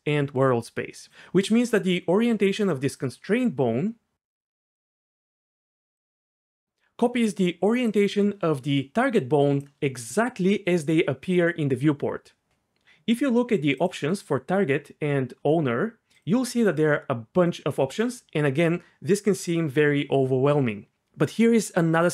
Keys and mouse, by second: 1.1 ctrl+z, 1.1 d, 4.7 drag, 5.9 click, 7.9 click, 14.1-15.3 drag, 16.1-17.7 drag.